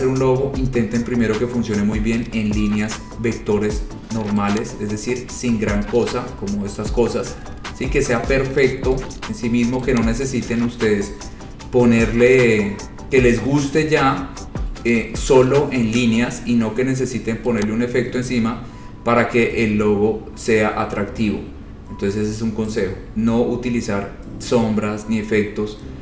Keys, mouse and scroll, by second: 0.7-1.4 scroll, 3.8 scroll, 4.8 click, 5.3-5.9 scroll, 6.4-8.1 scroll, 9.2 scroll, 10.1 click, 10.9-12.6 scroll, 13.1-15.0 scroll, 16.3-17.1 scroll, 17.8 click, 18.4-19.6 scroll, 20.1-20.6 scroll, 21.4-22.2 scroll, 25.9-26.0 scroll.